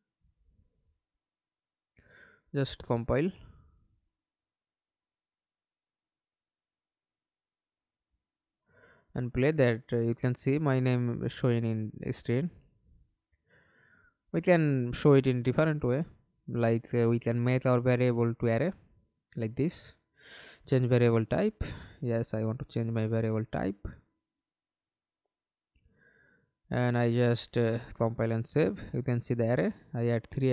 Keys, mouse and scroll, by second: 0.9 right click, 2.2 alt+F9, 6.1 double click, 6.5 double click, 6.9 middle click, 7.6 F11, 8.2 alt+p, 11.3 Escape, 11.6 middle click, 12.3 F11, 15.5 alt+click, 29.1 double click.